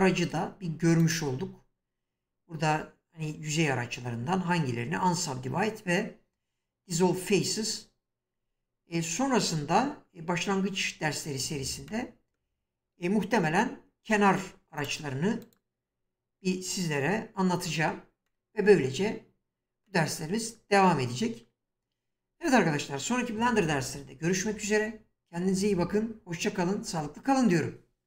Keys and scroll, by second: 14.0 2.